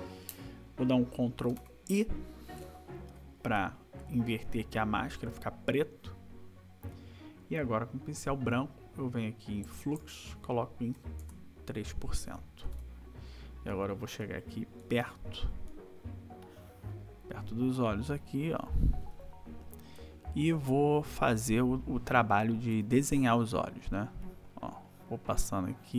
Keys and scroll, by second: 1.5 ctrl+i, 13.2 ctrl+=, 15.7 space, 19.0 ], 20.9 ], 22.7 \, 25.5 ].